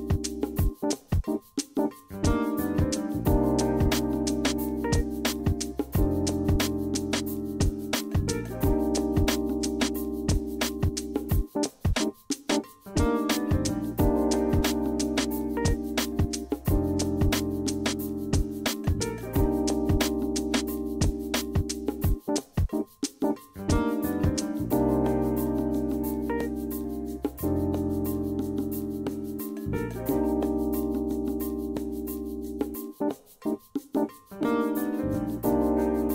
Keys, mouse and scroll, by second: 2.1 a, 3.7 d, 3.9 a, 4.9 d, 6.5 a, 7.2 d, 7.7 a, 9.2 d, 9.4 a, 12.2 click, 13.4 click, 15.0 click, 16.3 click, 17.2 click, 18.4 click, 19.3 click, 19.9 click, 21.4 click, 22.7 click, 23.4 click, 25.6 click, 27.5 click, 28.0 middle drag, 28.1 middle click, 28.4 middle click, 30.2-30.6 drag, 30.8 scroll up 1, 31.1-31.5 middle drag, 32.3 F8, 32.7 scroll down 1, 33.3-34.1 drag, 34.7-35.2 scroll down 1, 35.6-35.9 scroll down 1.